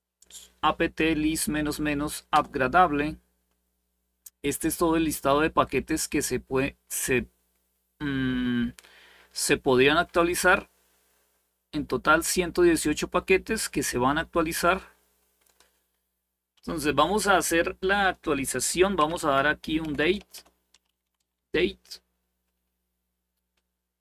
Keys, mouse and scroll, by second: 2.0 Return, 5.0-6.0 scroll up 1, 6.0-7.3 scroll up 1, 7.9-9.8 scroll up 1, 9.8-11.2 scroll up 1, 11.2-12.4 scroll up 1, 13.9-18.7 scroll down 2, 18.5-21.4 typing, 21.4 Return.